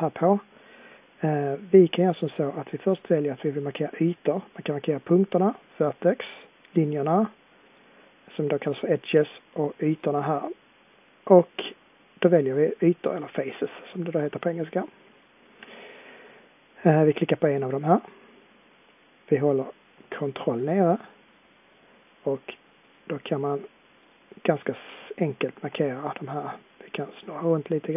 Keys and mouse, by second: 20.9-27.4 drag, 27.4 middle click.